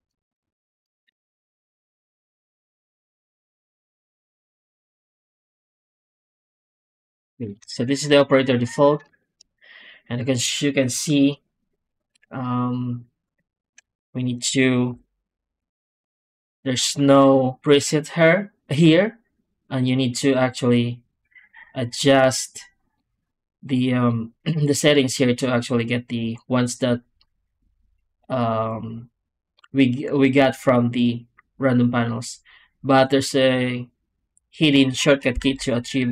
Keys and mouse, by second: 0.4 alt+shift+z, 1.1 Tab, 2.1 Tab, 2.8 shift+q, 4.7 w, 7.4 shift+click, 9.1 shift+click, 14.8 F9.